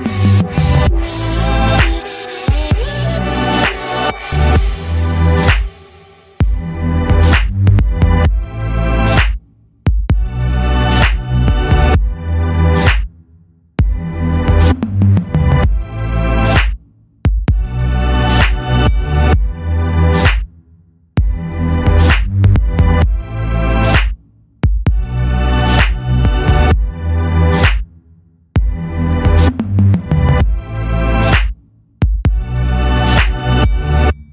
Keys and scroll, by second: 10.0 shift+m, 14.4 shift+m, 25.9 shift+m, 32.7 shift+m.